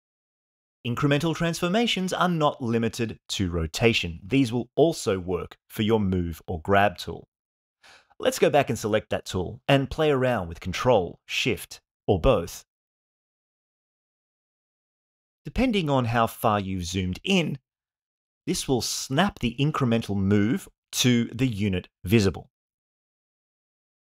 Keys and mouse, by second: 6.8 click, 8.8-13.6 drag, 14.0-24.2 drag.